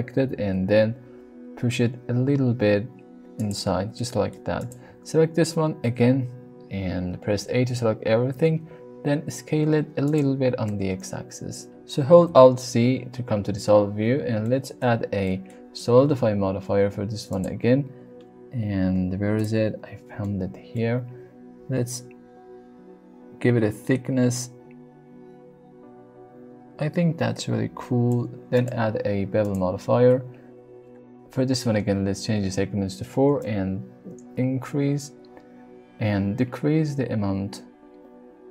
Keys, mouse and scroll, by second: 0.2 g, 0.5 x, 3.4 click, 3.7 Tab, 3.9-4.4 middle drag, 5.8 Tab, 7.5 a, 8.3 s, 8.4 x, 10.0 click, 10.7 Tab, 11.7 alt+z, 14.4-14.8 middle drag, 15.3 middle click, 19.4 click, 20.2-20.8 shift+middle drag, 21.9-28.1 shift+drag, 29.5 drag, 31.1 click, 33.4-38.5 shift+drag.